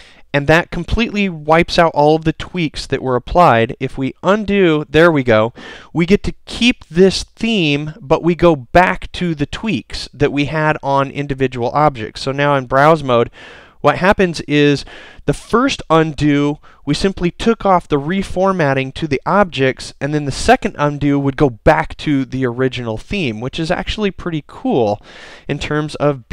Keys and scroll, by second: 12.0 super+b.